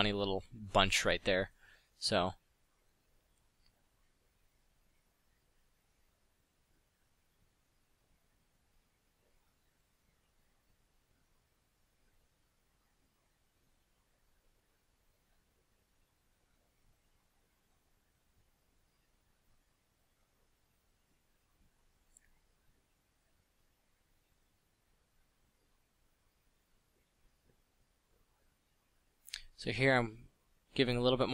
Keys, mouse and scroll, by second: 5.0 f, 6.8 f, 7.9 f, 9.4 f, 14.1 f, 19.6 f, 26.6 f, 28.0 f, 29.1 f, 30.1 f, 30.4 f.